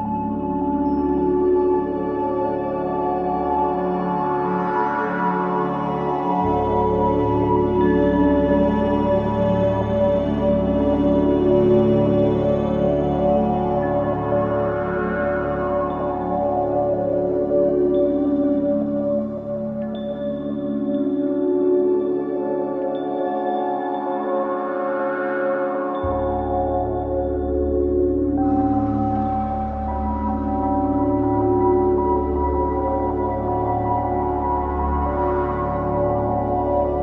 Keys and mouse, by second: 0.8-1.7 alt+drag, 2.5 click, 3.5 click, 4.5-6.3 alt+drag, 8.1 alt+click, 9.2 alt+click, 10.3 ctrl+alt+click, 10.9-15.9 alt+drag, 16.5-17.0 drag, 18.3-19.8 shift+drag, 21.0 click, 22.2-24.0 shift+drag, 26.2 click, 28.3-31.5 shift+drag, 31.8-33.0 shift+drag, 33.4-34.0 alt+drag, 34.5-36.3 alt+drag.